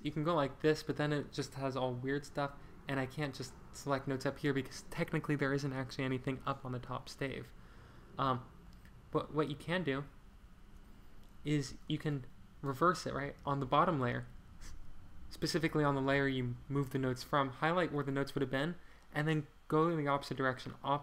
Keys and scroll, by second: 7.3 super+z, 8.1 super+z, 11.5 Escape.